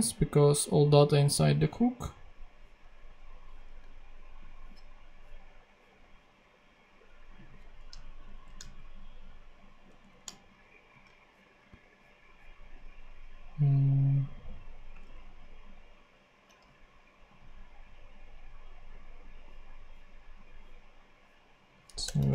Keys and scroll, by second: 8.1 super+Left, 9.8 shift+Down, 10.8 shift+super+c, 21.9 Return.